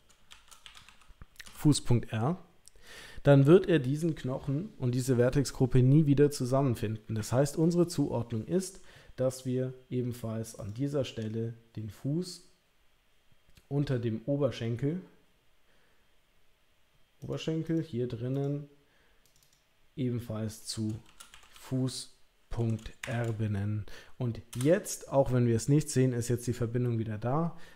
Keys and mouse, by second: 0.8 s, 17.6 click, 18.4 click, 19.4 click, 21.5 s.